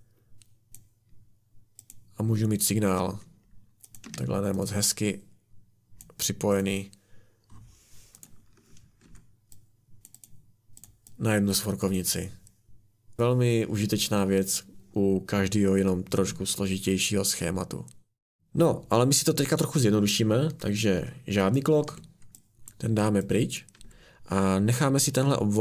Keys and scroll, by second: 4.0 Escape, 9.0 Delete, 21.9 Delete, 23.8 Delete.